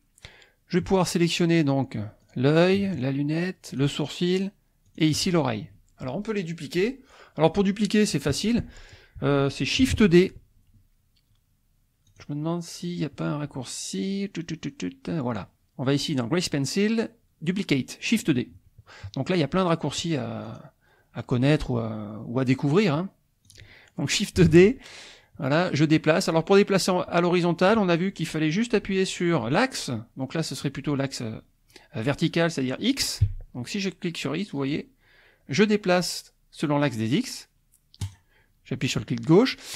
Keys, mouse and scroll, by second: 2.4 click, 2.9 shift+click, 3.7 shift+click, 4.8 shift+click, 12.1 click, 20.5 click, 23.5 click, 24.5 shift+d, 33.2 x, 38.0-39.7 drag.